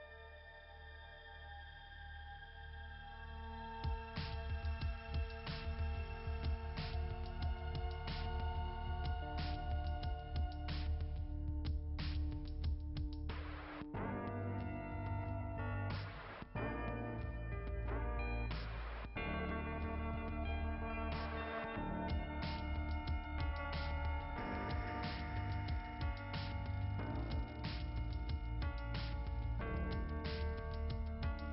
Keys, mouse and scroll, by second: 0.7 [, 1.1 click, 2.4 click, 8.3 click, 11.7 click, 13.9 click, 16.3 click, 16.5 click, 17.5 click, 26.3-27.4 typing, 29.0 click.